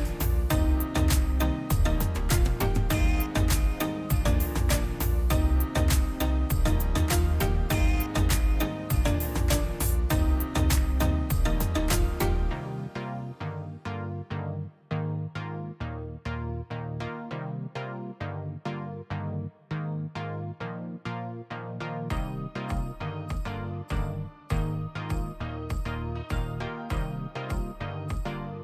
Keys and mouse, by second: 0.4 shift+click, 0.8-1.8 middle drag, 1.8 space, 2.4-3.5 drag, 3.5-5.0 middle drag, 7.4 click, 8.2-9.7 middle drag, 9.8 2, 10.2-12.0 alt+drag, 12.3 s, 14.3 3, 15.2 w, 15.6-17.8 drag, 17.8 z, 17.9 e, 19.6 s, 20.5-22.0 middle drag, 24.0 Tab, 24.3-25.1 middle drag, 25.8-28.6 right drag.